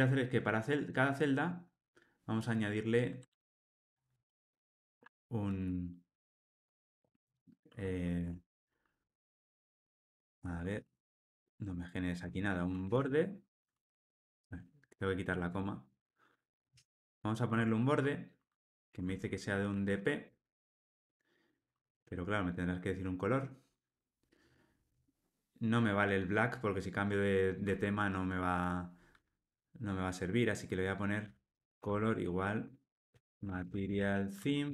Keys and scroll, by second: 8.1 Tab, 10.9 super+z, 17.5 Tab, 18.8 Tab, 34.4 Return.